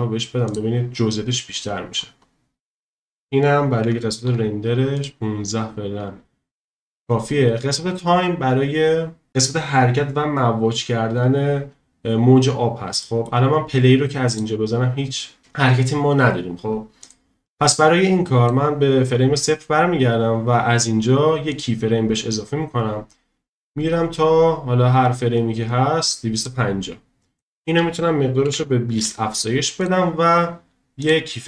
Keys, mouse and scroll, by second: 0.5 middle click, 3.0-5.0 drag, 13.0 middle click, 14.3 click, 17.0 click, 17.7 click, 21.5 click, 23.6-26.5 drag, 27.4-29.8 drag, 31.0 click.